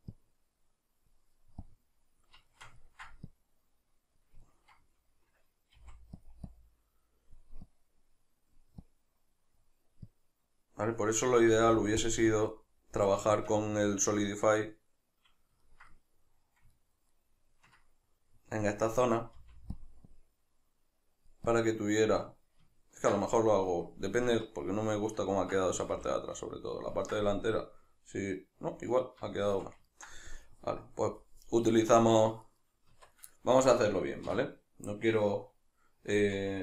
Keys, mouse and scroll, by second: 2.5 ctrl+shift+middle click, 3.3-4.5 drag, 4.5-6.3 ctrl+middle drag, 5.8 f, 6.3 click, 11.5 click, 11.5 f, 13.3-19.9 shift+middle drag, 19.4 f, 19.9 click, 22.4-32.4 middle drag, 24.3 Tab, 25.8 a, 32.4 right click, 32.9 Tab, 33.3-36.6 shift+middle drag, 34.3 \.